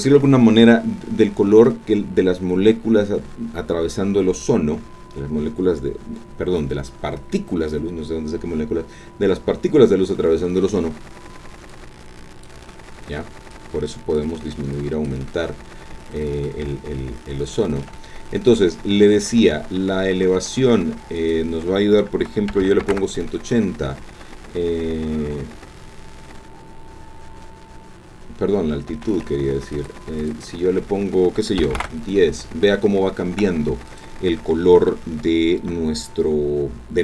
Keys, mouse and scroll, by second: 11.7 click, 13.5 click, 14.8 click, 17.0-18.0 shift+drag, 18.1-18.4 shift+scroll down 1, 21.2 click, 22.5 KP_1, 22.6 KP_8, 22.8 KP_0, 22.9 KP_Enter, 28.9 ctrl+z, 29.8 click, 30.2 click, 31.6 KP_1, 31.7 KP_0, 31.9 KP_Enter, 33.9 click.